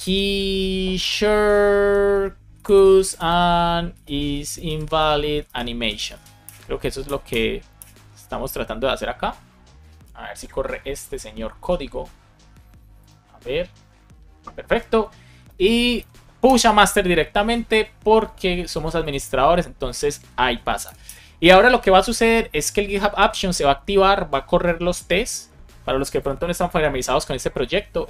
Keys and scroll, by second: 0.1 space, 2.8 space, 6.4 Return, 7.0 Return, 7.7 Return, 16.4 Return, 21.0 Return, 26.6 super+t.